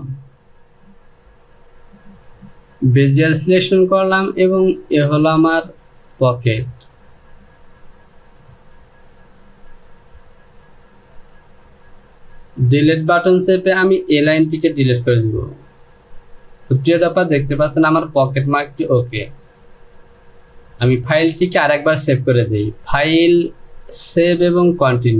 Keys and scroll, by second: 12.1 Delete, 16.4 Home.